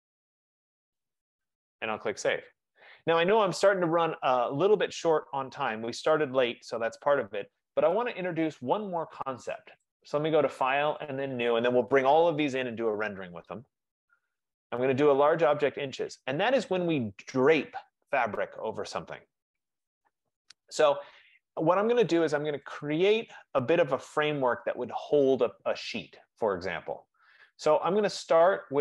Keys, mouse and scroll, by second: 0.0-0.8 typing, 2.4 typing, 10.1 click, 11.3 click, 13.4 click, 14.8 click, 15.2 F15, 20.9 click, 21.7 middle click, 22.0 middle click, 22.8 click, 23.4 click, 28.2 click.